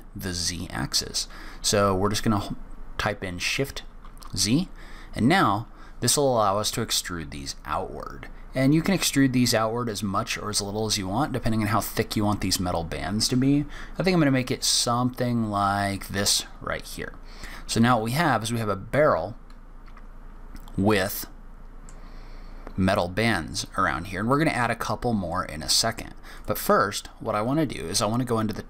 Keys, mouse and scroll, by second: 16.8 middle click, 17.6-19.9 scroll down 2, 21.2 middle click, 25.3 middle click, 26.3 click.